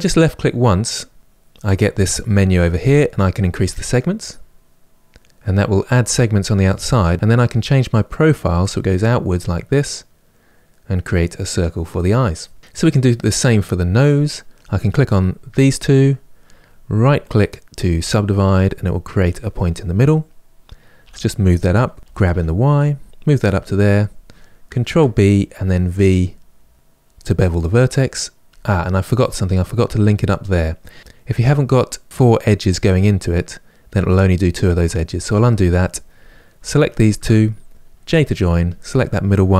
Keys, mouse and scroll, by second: 3.6 click, 7.1-9.0 drag, 13.0 click, 14.2 click, 15.3 shift+click, 17.0-19.0 right drag, 19.0 click, 20.7 g, 24.5 ctrl+b, 34.9 ctrl+z, 35.9 click, 36.6 shift+click, 37.7 j, 38.4 click.